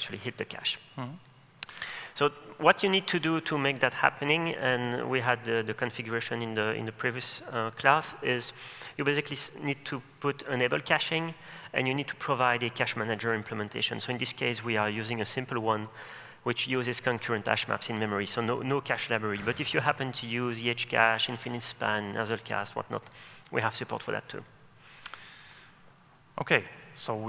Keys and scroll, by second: 10.7 super+e, 26.1 super+e.